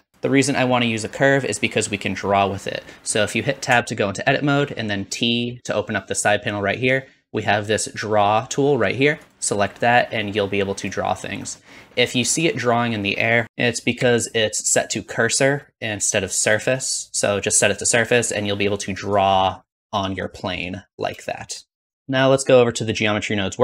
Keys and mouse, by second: 3.6 Tab, 5.3 t, 9.2-11.3 drag, 11.5 middle click, 13.4 ctrl+z, 13.9 n, 15.6-19.0 drag, 19.4-20.6 middle drag, 21.0 click, 21.8 ctrl+click, 21.9 n.